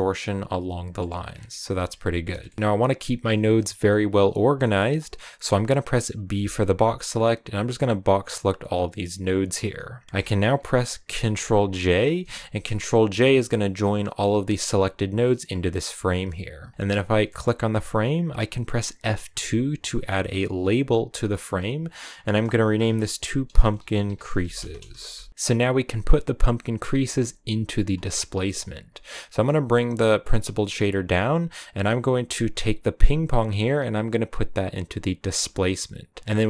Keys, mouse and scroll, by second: 0.9-1.7 scroll down 6, 1.7-11.6 middle drag, 11.6 ctrl+j, 12.5-15.7 drag, 25.3 scroll up 1, 28.8-35.3 drag, 36.2-36.4 drag.